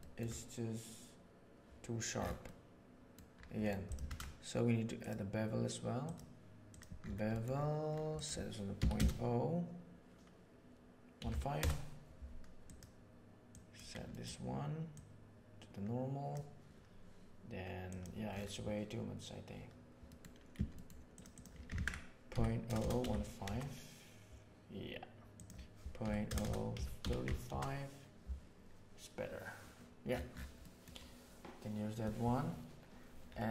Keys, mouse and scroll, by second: 2.4 middle click, 4.0 shift+a, 7.2 middle click, 8.0-12.1 drag, 12.6 click, 13.4 click, 14.1 middle click, 14.9-16.2 drag, 17.8 click, 20.1 middle click, 20.7 middle click, 21.0-24.3 drag, 22.7 KP_0, 25.3-28.2 drag, 26.4 KP_0, 30.6 middle click.